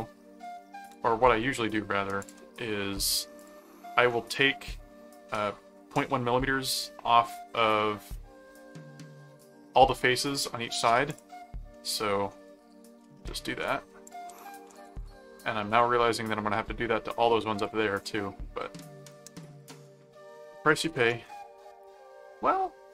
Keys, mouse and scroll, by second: 0.9 ctrl+click, 1.2 ctrl+Tab, 2.2 ctrl+click, 3.4 click, 5.3 middle click, 8.1 middle click, 11.1 click, 11.7 middle click, 13.0 middle click, 14.0-15.7 typing, 14.0 click, 15.9 Return, 19.4 click.